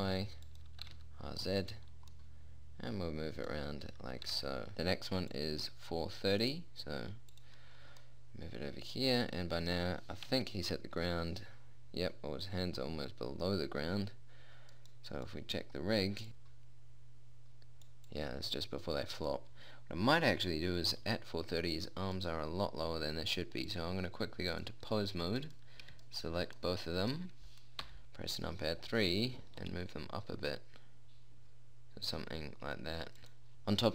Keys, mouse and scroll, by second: 1.3 r, 4.7 click, 5.3 middle click, 5.8 click, 7.5 middle click, 8.2-10.2 middle drag, 10.7 KP_1, 11.2 KP_3, 15.2-17.5 drag, 17.5 middle click, 18.5-20.5 drag, 22.2-24.1 right drag, 24.1 click, 25.9 click, 28.3 KP_1, 28.8 KP_3, 30.1 g, 33.7 a.